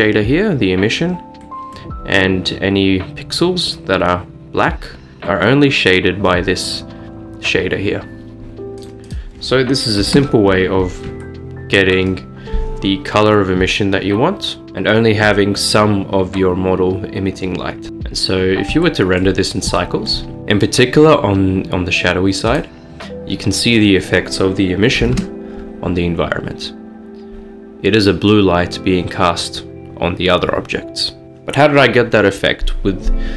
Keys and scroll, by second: 10.2-14.5 Return, 17.9 s, 25.3 Return, 26.1 typing.